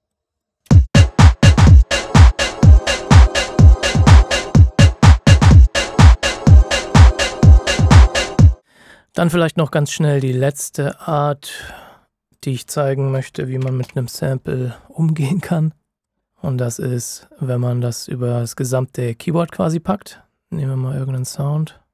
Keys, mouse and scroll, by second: 0.0-0.6 typing, 2.0 click, 9.3-9.8 scroll down 2, 10.9 ctrl+shift+scroll up 1, 11.6-12.3 shift+scroll up 1, 12.3 click, 12.8-14.3 typing, 15.1 click, 21.1 click.